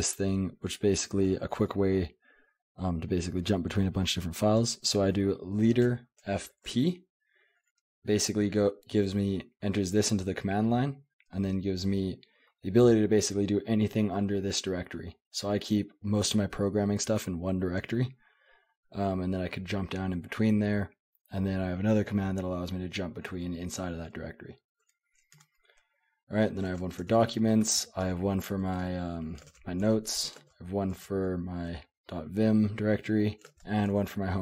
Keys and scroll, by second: 0.4-3.0 typing, 4.6 j, 5.8-7.2 typing, 25.3 Escape, 25.9-31.7 typing, 27.0 Escape, 28.0 Escape, 30.9 Escape, 33.0-34.4 typing.